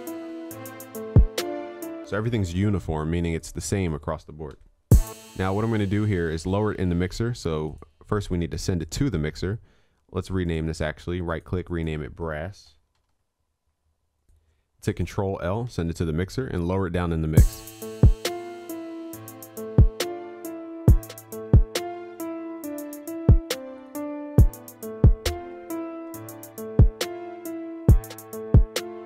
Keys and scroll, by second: 4.6 ctrl+s, 15.8 ctrl+l, 26.6 ctrl+s.